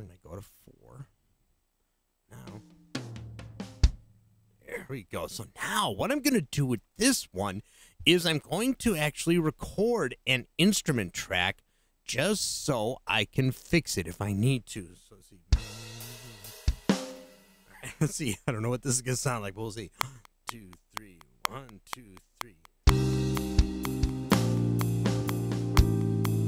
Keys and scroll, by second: 19.9 *.